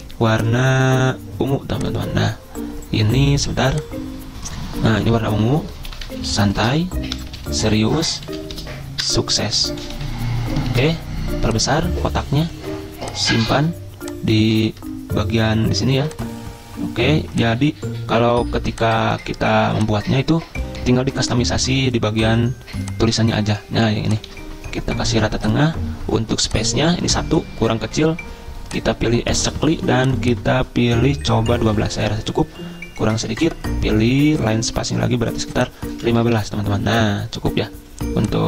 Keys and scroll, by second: 5.6-10.8 typing, 9.0 Return, 24.3 ctrl+a, 31.7 Return, 35.9-36.8 typing.